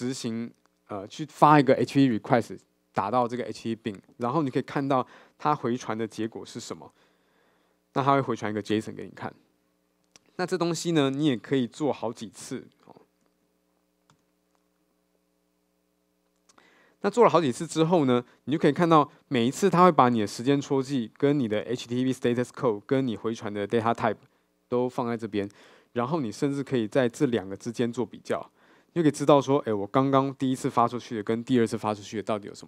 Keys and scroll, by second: 7.4 super+b, 12.5 alt+Return.